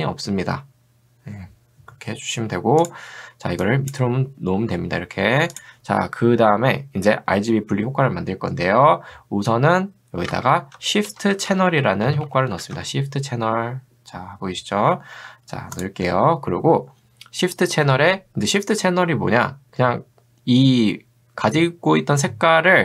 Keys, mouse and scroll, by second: 3.7 click, 5.5 click, 10.3 ctrl+space, 11.1-13.1 typing.